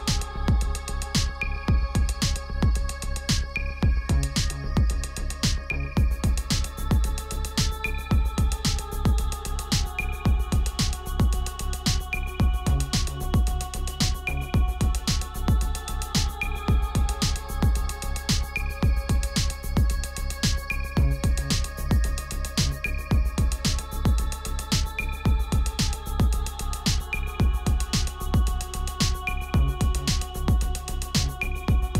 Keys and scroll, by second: 29.5 Return.